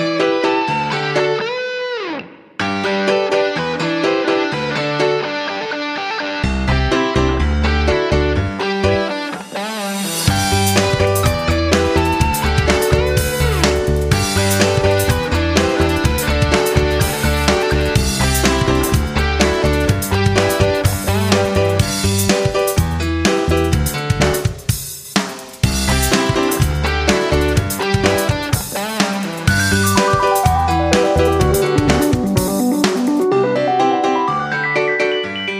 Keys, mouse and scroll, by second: 0.2 click, 2.3 shift+click, 3.1 click, 5.4 shift+click, 6.2 click, 7.7 scroll, 9.2 click, 14.2 ctrl+d, 14.9-17.0 drag, 17.0 F9, 17.6-21.3 drag, 22.4-23.1 typing, 24.1 Return, 26.0 click, 27.3 ctrl+scroll up 1, 28.1 click, 28.4 right click, 29.0 click, 30.4 ctrl+scroll, 31.0-32.5 drag, 33.1 F9, 33.5-35.5 drag.